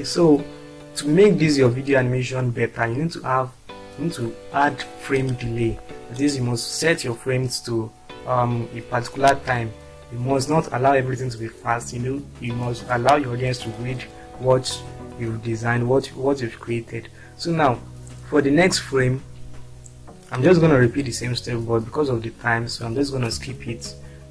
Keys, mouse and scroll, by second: 15.5-16.1 scroll down 2, 17.7-18.1 scroll up 2, 19.2-19.8 scroll down 2, 20.4 click.